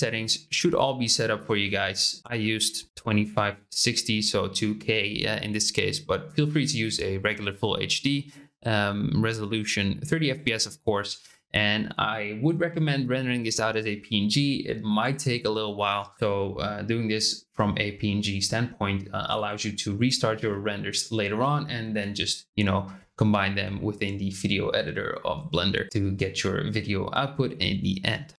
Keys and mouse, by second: 0.1 click.